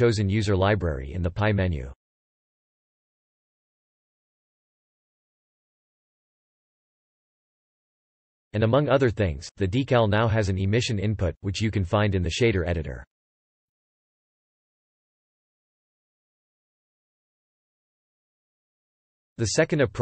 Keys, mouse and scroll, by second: 0.0 middle click, 1.3 shift+d, 2.3 middle click, 6.1 middle click, 6.5 shift+middle drag, 6.7 shift+scroll down 1, 7.0-7.5 middle drag, 7.4 Page_Up, 7.6 middle click, 7.9-8.6 shift+middle drag, 8.6 shift+scroll up 2, 9.1-9.4 middle drag, 9.7 Page_Up, 9.7 g, 10.3 Pause, 10.7 middle click, 11.1 scroll down 1, 11.4 middle click, 11.7 scroll up 2, 14.4 click, 16.0 4, 16.3 Return, 17.1 Pause, 17.5 click, 17.6 scroll down 2, 17.7-18.6 drag, 18.6 Page_Up, 18.7 g, 19.3 shift+x, 19.9 shift+click.